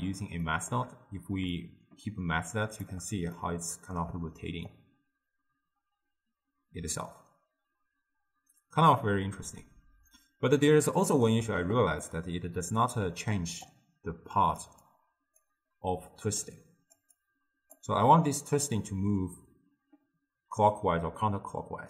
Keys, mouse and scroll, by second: 0.5-1.6 middle drag, 1.6-3.4 shift+drag, 3.4-4.7 middle drag, 4.7-7.8 shift+drag, 12.1-13.0 middle drag, 13.0-17.8 typing, 13.7 click, 14.9 click, 16.4 click, 17.2 click, 20.9 d.